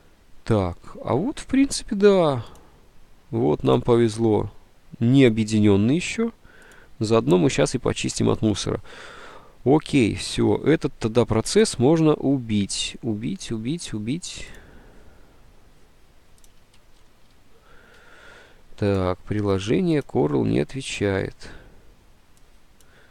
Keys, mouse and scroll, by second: 10.1 alt+Tab, 17.5 ctrl+shift+Escape.